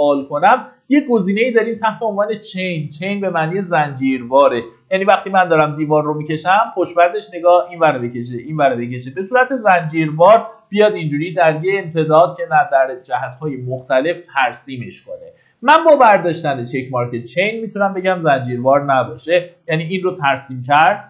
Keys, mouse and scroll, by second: 4.0-4.4 scroll down 1, 4.4 middle click, 5.3 click, 14.0 Escape, 17.1 click, 17.8-18.7 scroll up 1, 18.7-21.0 drag.